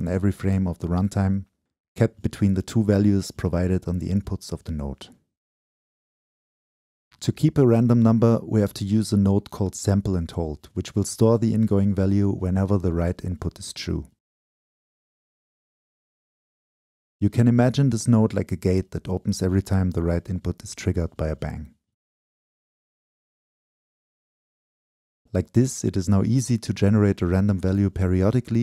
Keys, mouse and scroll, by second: 0.0-2.1 drag, 5.1 middle click, 5.6-9.0 drag, 9.4-14.3 drag, 15.0 click, 15.5 right click, 16.2-17.7 shift+middle drag, 17.7 right click, 17.9-20.1 drag, 20.1 middle click, 20.7-28.6 drag.